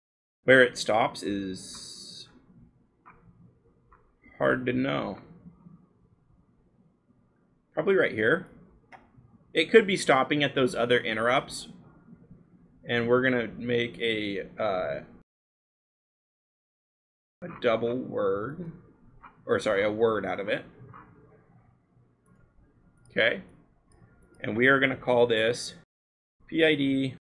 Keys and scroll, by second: 9.5 c, 12.6 b, 15.2-16.0 scroll, 16.0 b, 16.4 scroll, 24.8 l, 26.2-27.3 typing.